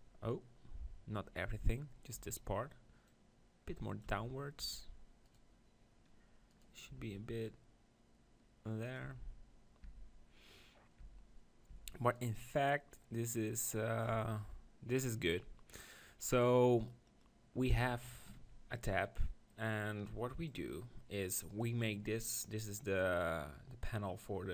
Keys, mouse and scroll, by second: 1.8 middle click, 2.2 Tab, 3.1-4.9 drag, 4.1 Tab, 4.7 Tab, 5.2-8.5 right drag, 6.9 r, 9.0-10.1 drag, 9.1 Tab, 9.8 Tab, 11.0 Tab, 11.7 Tab, 12.1-14.2 right drag, 12.6-14.2 drag, 14.2 Tab, 22.2-24.5 drag.